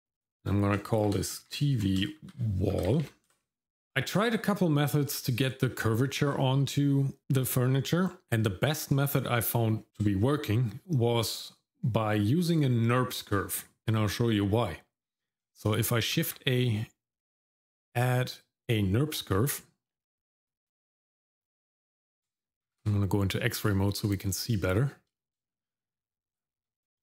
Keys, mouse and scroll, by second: 0.0 click, 0.2-3.3 drag, 3.0 l, 3.6 shift+middle click, 13.8 middle click, 16.1 shift+a, 22.7 shift+z, 24.5 middle click, 25.5-26.6 shift+middle drag.